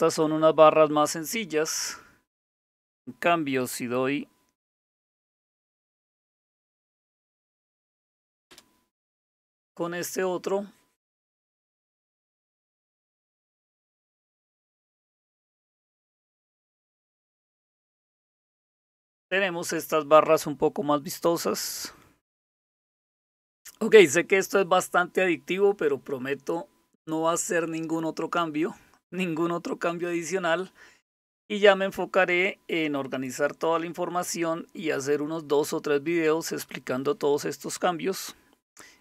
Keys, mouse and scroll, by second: 2.8 click, 5.7 alt+super+t, 7.4 Down, 8.5 Return, 21.4 click, 22.9 click.